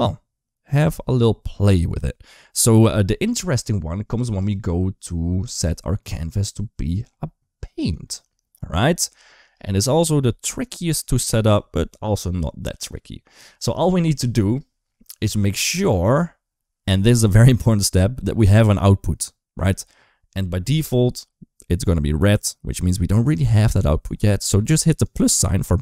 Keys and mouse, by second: 4.3 click, 5.4 click, 6.8-7.9 drag, 18.3 click, 24.8 click, 25.7 click.